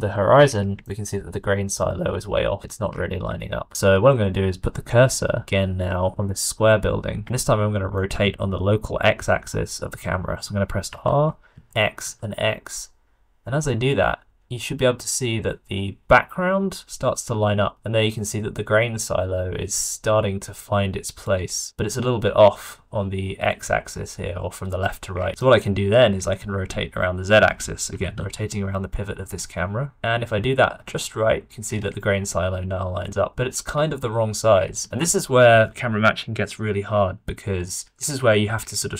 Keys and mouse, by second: 0.8 shift+middle click, 4.0 shift+click, 7.5 shift+click, 10.8 r, 25.6 shift+middle click, 27.0 shift+middle drag, 27.8 r.